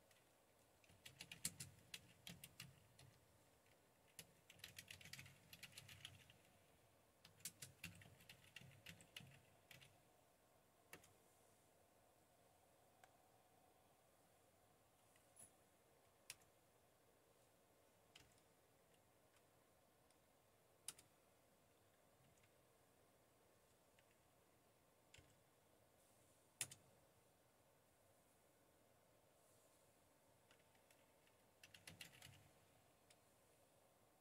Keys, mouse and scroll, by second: 0.7-9.8 typing, 10.8-12.3 typing, 18.2 Tab, 20.9 Return, 22.3 Down, 26.6 Return, 32.0-32.8 typing.